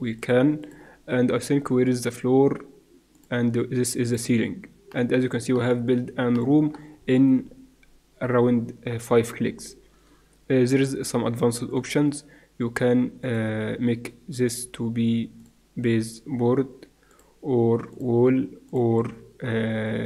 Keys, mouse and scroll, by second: 3.1 middle click, 4.1-6.7 drag, 7.7 middle click, 8.3 middle click, 9.4-11.7 middle drag, 11.7-16.0 drag, 17.1-20.0 drag.